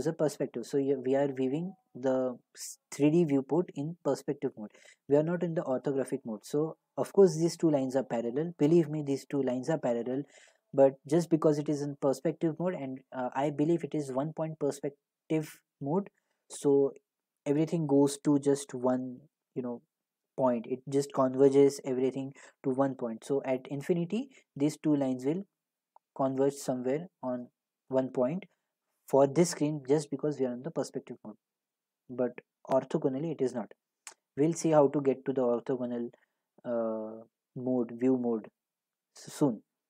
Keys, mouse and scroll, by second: 3.9 g, 5.7 x.